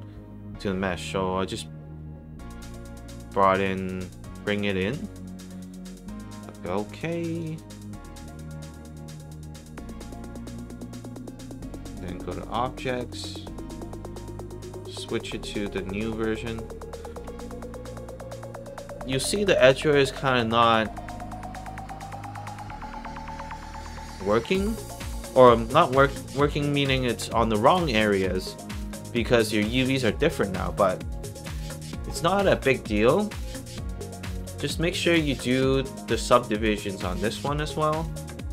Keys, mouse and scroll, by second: 3.7 click, 7.2 click, 12.7 click, 15.9 click, 17.5 alt+click, 17.9 alt+middle click, 18.2 alt+right click, 18.5 alt+click, 19.9 alt+click, 20.6 alt+click, 21.0 alt+middle click, 21.4 alt+click, 22.7 alt+click, 25.5 alt+right click, 25.9 alt+middle click, 26.3 alt+right click, 26.7 alt+click, 27.5 alt+right click, 28.5 alt+click, 30.5 alt+right click, 30.8 alt+click, 34.8 click, 37.6 click.